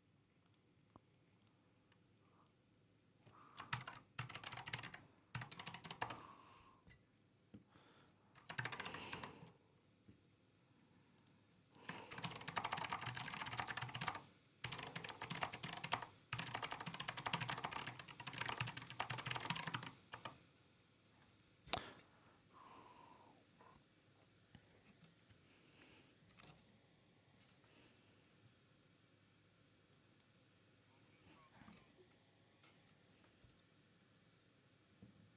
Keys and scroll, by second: 3.8-6.2 typing, 8.4 alt+r, 8.6 Right, 8.8 Right, 9.0 Escape, 12.4-20.1 typing.